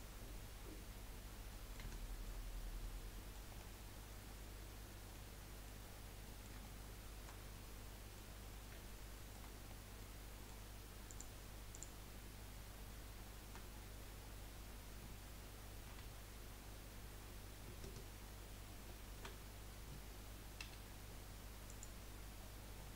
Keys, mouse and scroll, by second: 0.0 F3, 1.5 middle click, 2.4 scroll up 3, 2.8 middle click, 3.5-5.1 scroll up 12, 5.1 middle click, 5.9 scroll down 6, 6.3-8.4 middle drag, 8.4-8.8 scroll down 3, 8.8 shift+middle click, 9.7 scroll up 1, 10.1 middle click, 11.1 click, 11.7 shift+click, 13.6-14.7 scroll down 7, 15.9 3, 18.8 ctrl+z, 19.3-20.6 scroll up 3, 21.9 F3, 22.4-22.9 scroll down 16.